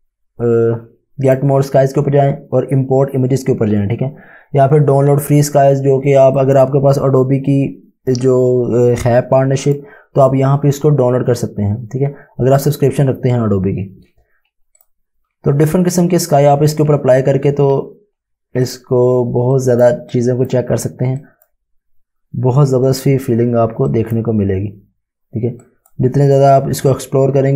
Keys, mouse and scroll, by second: 1.3 click, 6.3 click, 9.6 click, 14.8 click, 18.6 click.